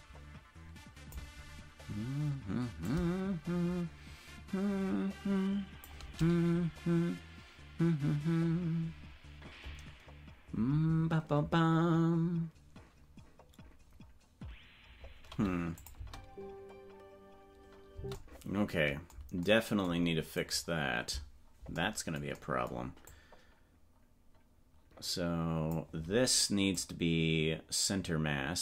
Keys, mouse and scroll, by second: 2.8 click, 4.4-5.9 shift+drag, 15.9 click, 16.0 space, 18.1 space, 20.6-21.7 right drag, 23.2-25.8 drag, 26.7-28.6 drag.